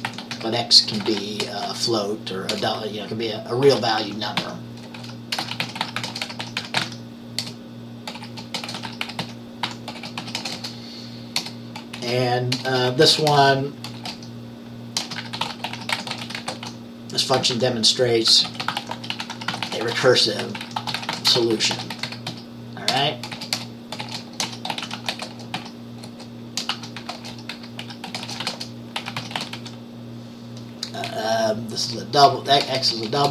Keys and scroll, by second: 0.0-33.3 typing.